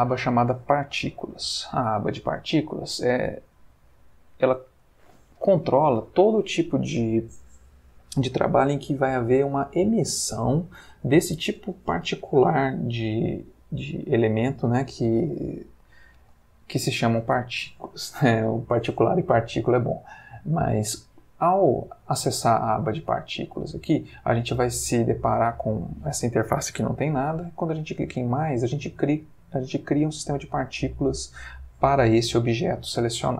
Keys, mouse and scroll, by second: 2.9-4.9 middle drag, 4.9 ctrl+scroll up 1, 5.0-5.7 ctrl+middle drag, 5.7-8.7 ctrl+scroll up 1, 16.6-17.3 ctrl+middle drag, 17.3-19.3 ctrl+scroll up 1, 28.2 click.